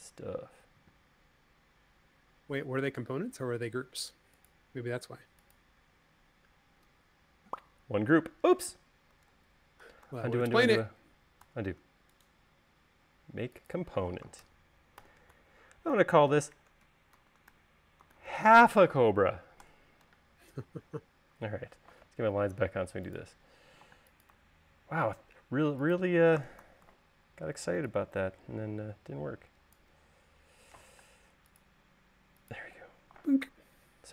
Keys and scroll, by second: 9.7 super+z, 11.9 super+z, 15.5-17.7 typing, 20.3 Return, 21.5 m, 24.5 m, 27.4 s, 31.7 m.